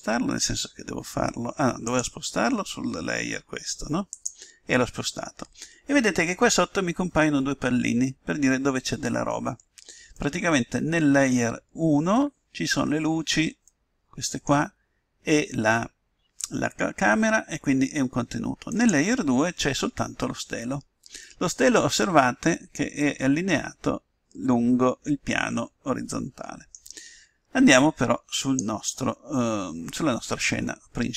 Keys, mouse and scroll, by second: 9.0-15.4 middle drag, 18.7-20.2 drag, 20.2-22.9 middle drag, 28.4-30.1 drag, 30.1-31.1 middle drag.